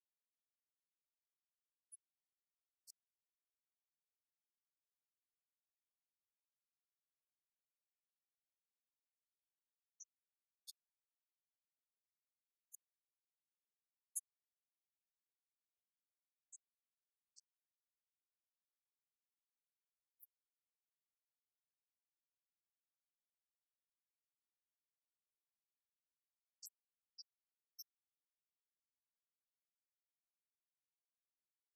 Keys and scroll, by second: 27.9 alt+d.